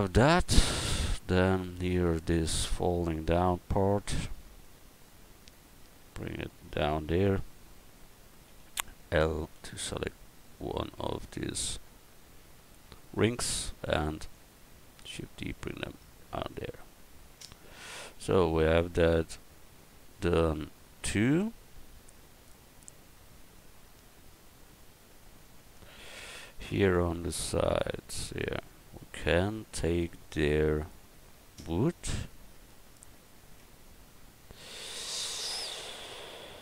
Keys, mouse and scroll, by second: 1.5 Tab, 1.8 right click, 2.0 Tab, 3.7-5.2 right drag, 5.6-7.2 right drag, 8.4 a, 9.5 l, 10.9 a, 11.4 l, 13.5 shift+d, 14.3-16.7 drag, 15.9 Tab, 18.1 a, 32.6 Tab, 33.1 Tab, 33.6 Tab.